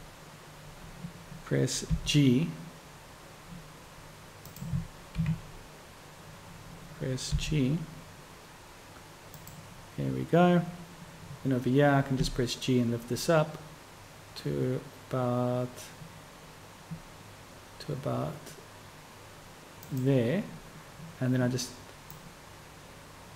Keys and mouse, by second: 2.8 g, 5.2 KP_3.